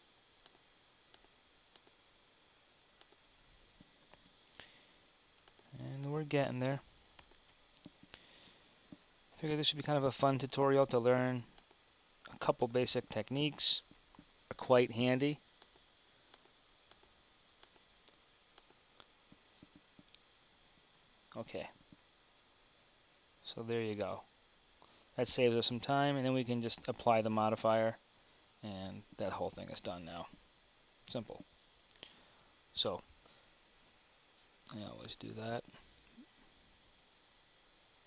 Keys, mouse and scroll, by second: 21.8 Tab, 23.8 Tab, 27.9 Tab, 31.1 KP_1, 33.2 b, 35.3 KP_1, 36.1 b, 37.1 q.